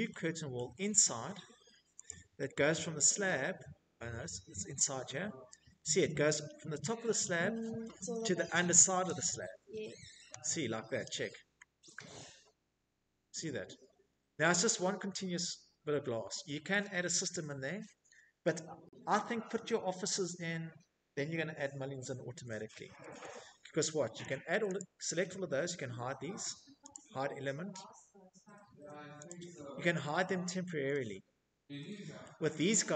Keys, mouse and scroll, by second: 1.1 scroll, 2.2-2.8 shift+middle click, 2.4-2.8 scroll, 2.8 Escape, 3.2 middle click, 3.3 Escape, 3.3 middle click, 3.6 Escape, 4.5 middle click, 4.7 middle click, 5.0 middle click, 5.3 middle click, 5.4 click, 6.4 click, 7.0 middle click, 10.6 middle click, 14.2 shift+middle click, 20.2 middle click, 20.3 middle click, 20.3 Escape, 20.3 middle click, 20.6 Escape, 21.4 click, 21.7 Tab, 27.6 click, 29.7-30.4 shift+middle click, 29.9 middle click, 29.9 middle click, 30.4 middle click.